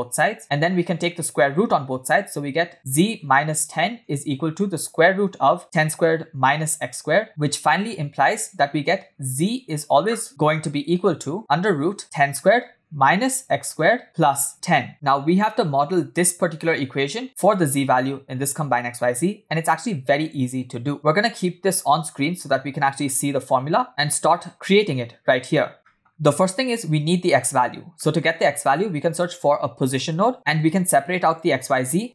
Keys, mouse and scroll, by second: 0.6 click, 1.0 click, 1.5 click, 2.6 click, 3.4 click, 4.1 click, 5.3 click, 6.4 click, 7.0 click, 7.5 click, 9.0 click, 10.2-11.9 click, 11.9 click, 13.4 click, 14.0 click, 14.3 click, 20.9 shift+middle click, 20.9 click, 21.4 scroll up 2, 21.6-21.9 scroll down 1, 22.1-22.6 shift+middle drag, 22.6-23.1 scroll up 3, 23.5-23.9 shift+middle drag, 24.4 scroll down 1, 24.5 middle click, 24.5-25.0 scroll up 1, 25.5 scroll down 1, 28.0 middle click, 28.6 shift+a, 30.9 shift+a.